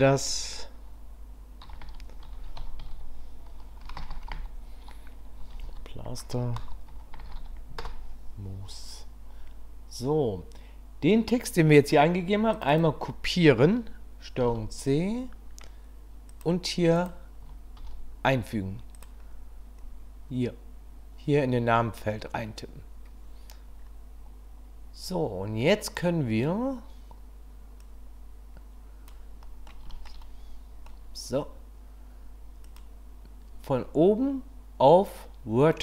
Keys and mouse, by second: 3.8 BackSpace, 7.3 o, 12.6 click, 12.7-16.4 drag, 17.0-19.0 drag, 28.0-29.1 drag, 29.4 middle click, 29.9 shift+middle click, 30.7 middle click, 32.8-35.8 drag.